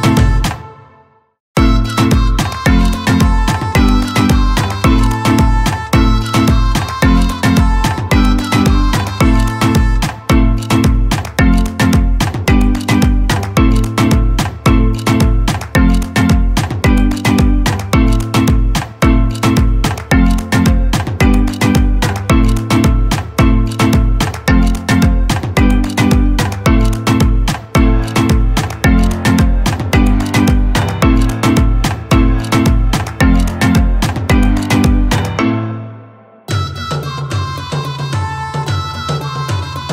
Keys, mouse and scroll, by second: 5.1 click, 17.9 click, 17.9 click, 22.7-31.4 drag.